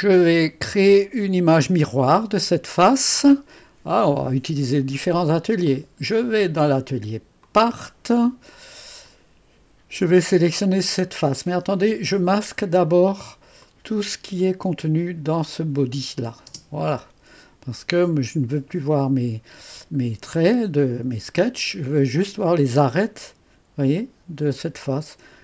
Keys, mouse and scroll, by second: 0.4-1.4 drag, 5.7 click, 6.3 click, 7.4-9.1 drag, 13.6 click, 16.5 space, 20.4-21.7 drag, 21.8-23.3 scroll up 2.